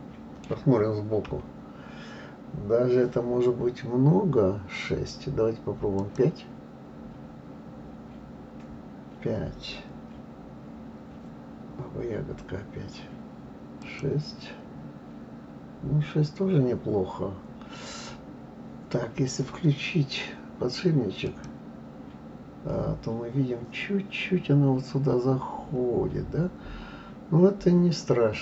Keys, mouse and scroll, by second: 1.3 KP_3, 6.0-8.9 drag, 13.8-16.3 drag, 21.2 click, 23.3-24.3 scroll up 2, 24.3-26.3 scroll up 1.